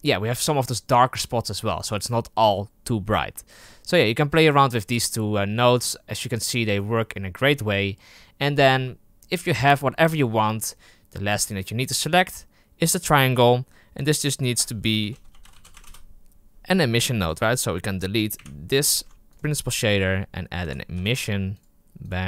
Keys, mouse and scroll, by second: 11.4-13.3 right drag, 13.3-16.9 drag, 17.1 click, 18.3 Delete, 18.8 shift+a.